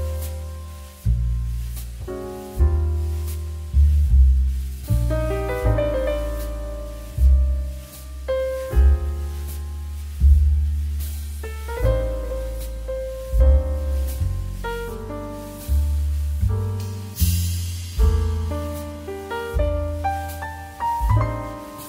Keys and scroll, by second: 19.3 2.